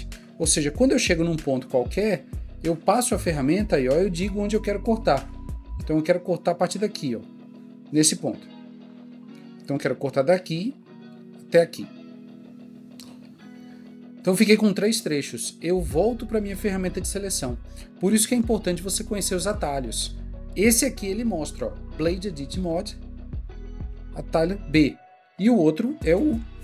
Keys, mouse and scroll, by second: 8.7 click, 8.9 click.